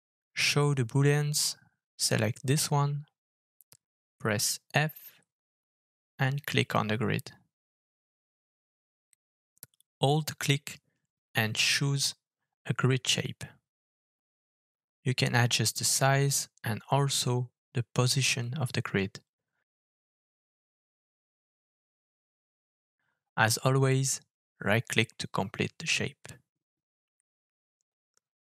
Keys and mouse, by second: 1.3 click, 4.4 alt+f, 21.7-27.8 middle drag, 28.3 click.